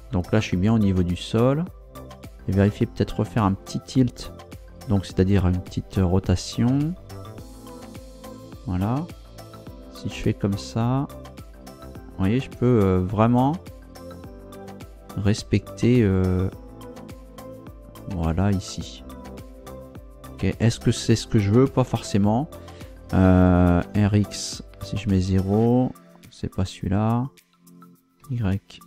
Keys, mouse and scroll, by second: 1.7-2.1 scroll up 2, 3.3 scroll down 2, 6.2 r, 7.1 Right, 8.6 Right, 13.8 click, 19.2-20.1 scroll down 3, 20.4-20.8 scroll up 2, 23.8 r, 24.1 x, 25.0 KP_0, 28.2 y.